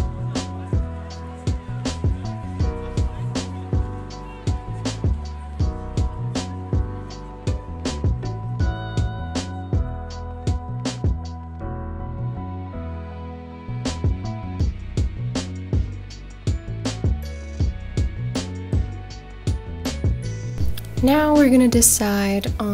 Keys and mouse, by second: 0.1 s, 1.6 click, 1.8 Tab, 6.9 Tab, 8.5-9.5 middle drag, 9.6 Tab, 10.4 Tab, 11.0 Tab, 11.3 ctrl+a, 11.8-14.9 right drag, 15.6 ctrl+a, 16.5-17.4 drag, 17.8-18.4 middle drag, 19.0 Tab, 19.8 click, 20.2 a, 20.5 middle click, 21.3 e.